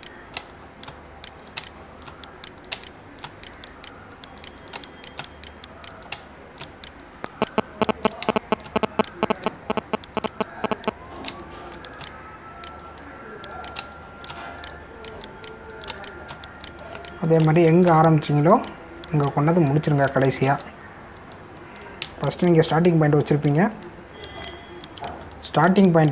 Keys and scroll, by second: 1.4 space, 5.8 space, 9.2 space, 12.3 space, 14.8 space, 16.9 space, 21.4 ctrl+alt+z, 23.0 space.